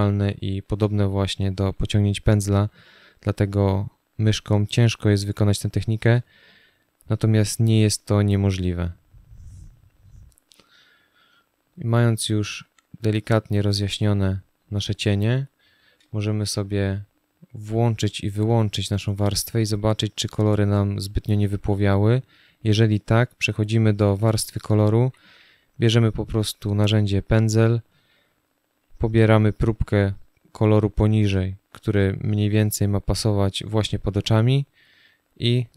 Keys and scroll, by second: 0.5 space, 5.8 space, 15.7 space, 24.7 b.